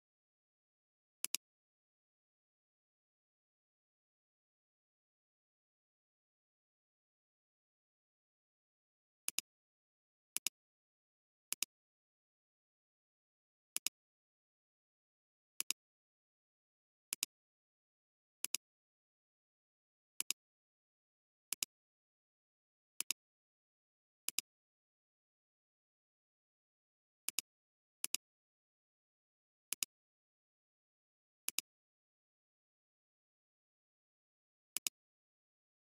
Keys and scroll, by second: 8.0 p, 10.3 alt+space.